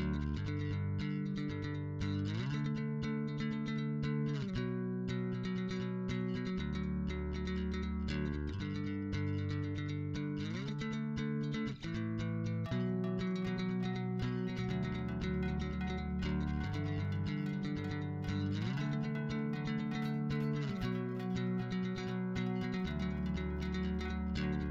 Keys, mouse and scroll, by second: 0.0 g, 0.4 b, 0.5 click, 2.6 click, 3.2 click, 4.6 b, 4.8-6.3 drag, 8.3 b, 8.6-11.7 drag, 13.0 a, 13.1 b, 13.2 click, 17.0 a, 17.3 click, 18.2 a, 18.3 b, 18.7 click, 21.6 a, 22.2 b, 22.6-24.7 drag.